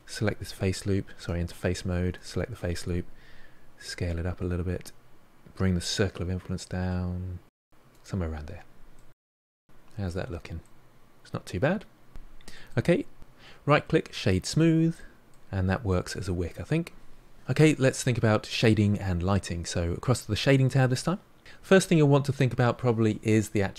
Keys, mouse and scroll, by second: 1.1 3, 2.2 alt+click, 3.8 s, 8.8-9.1 scroll down 3, 9.1-10.3 middle drag, 10.3-10.6 scroll down 2, 10.6-12.1 middle drag, 12.1 Tab, 12.5-14.3 middle drag, 14.3-14.9 right drag, 14.9-17.3 middle drag, 20.5-23.7 middle drag.